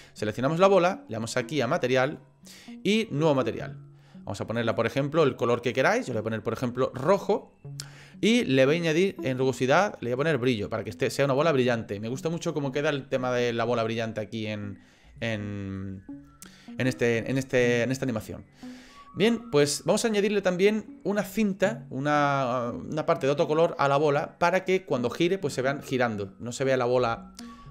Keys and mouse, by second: 1.9 click, 3.2 click, 9.0-11.4 drag, 15.2 shift+middle click.